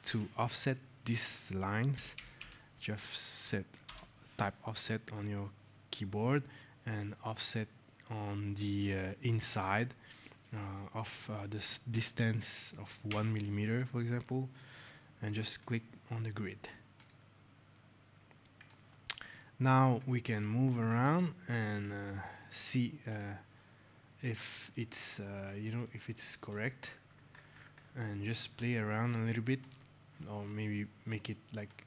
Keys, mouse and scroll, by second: 1.6-2.5 typing, 3.7 Return, 13.0 KP_1, 15.5 click, 17.8 scroll, 18.5 click, 18.7-19.0 scroll, 19.4 scroll, 20.2 click, 21.0 click, 23.0 click, 24.1 scroll, 24.6 right click, 24.7 middle click, 26.5 scroll, 29.5 click, 31.5 shift+click.